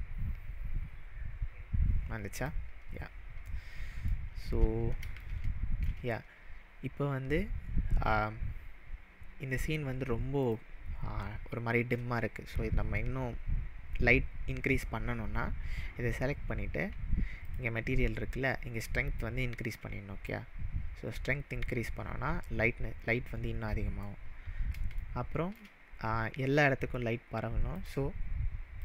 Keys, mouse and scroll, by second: 2.4 click, 2.8 scroll down 2, 3.5-4.0 middle drag, 10.4 click, 17.4 click, 19.2-19.7 drag, 23.9 click, 24.0-24.9 middle drag, 27.7-28.8 drag.